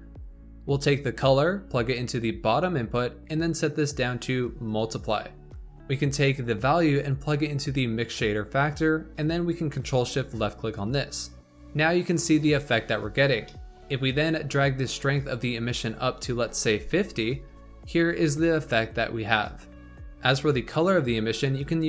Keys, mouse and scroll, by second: 0.8 click, 3.3-5.6 drag, 6.3-9.4 drag, 9.8 ctrl+shift+click, 11.5 middle click, 12.5 scroll down 3, 13.4 middle click, 13.9-15.2 scroll up 3, 15.2-17.0 drag, 17.4 scroll down 4, 18.5 scroll up 1, 19.9 click, 20.8 click.